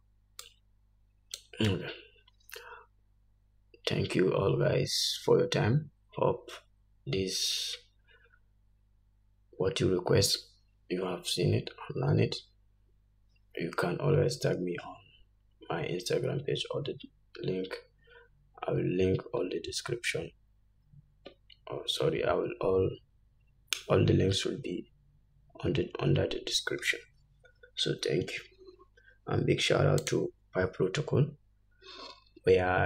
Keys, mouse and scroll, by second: 0.6-0.9 scroll down 1.